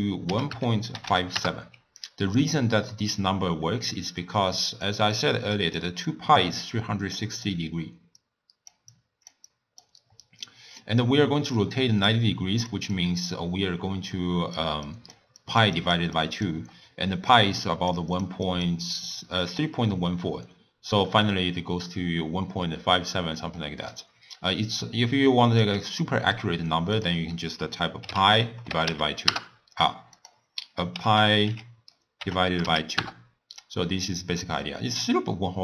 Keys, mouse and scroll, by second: 2.5-3.9 middle drag, 3.9 d, 4.3 click, 4.9-10.1 typing, 5.2 click, 5.6 click, 6.1 click, 6.8 click, 8.3 click, 9.0 click, 9.6 click, 10.5-11.8 middle drag, 11.8-22.4 typing, 12.1-12.8 drag, 13.0 click, 14.2 click, 15.0 click, 15.5 click, 15.8 click, 16.2 click, 17.5 click, 18.2 click, 18.6 click, 19.0 click, 19.5 click, 23.5 middle click, 23.7 d, 24.0-25.7 right drag, 25.7 d, 26.2 middle click, 27.0-30.1 drag, 30.3-33.3 drag, 35.0-35.6 drag.